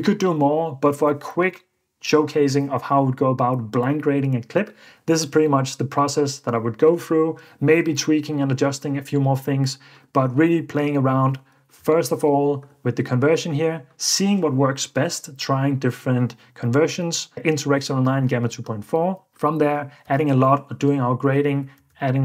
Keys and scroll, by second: 11.9 super+d, 20.1 super+d, 21.8 super+d.